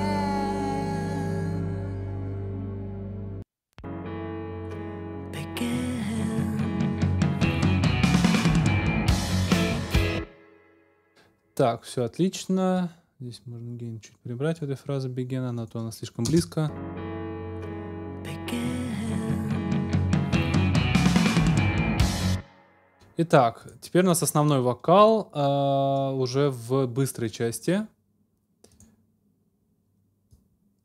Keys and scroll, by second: 9.9 ctrl+alt+space, 16.3 space, 20.8 super+s, 22.1 space.